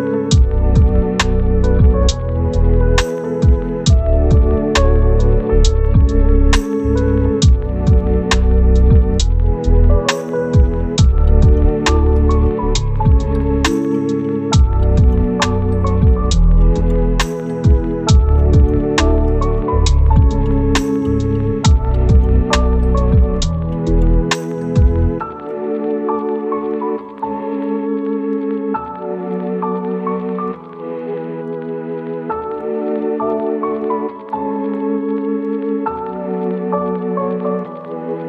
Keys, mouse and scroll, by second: 6.1-7.3 scroll down 1, 7.3 click, 7.5 right click, 8.0 click, 8.8 right click, 9.8 click, 12.2 right click, 12.5 scroll down 1, 12.7 scroll up 1, 12.7-14.7 right drag, 15.0 click, 15.2 right click, 15.9 scroll down 1, 16.0 scroll up 1, 18.5-18.9 scroll down 1, 18.9 right click, 19.8 scroll up 1, 20.0 right click, 22.8 scroll up 1, 23.0 right click, 23.7 scroll up 1, 23.9 right click, 24.1 scroll down 1, 24.2 scroll up 1, 24.4 right click, 24.7 scroll down 1, 24.8 scroll up 1, 25.1 right click, 25.5-25.8 scroll down 1, 26.1-28.8 scroll up 1, 28.8 right click, 29.1 scroll down 1, 29.2 scroll up 1, 29.3 right click, 29.7 scroll down 1, 29.9 scroll up 1, 30.0 click, 32.0-32.8 scroll up 1, 32.8 click.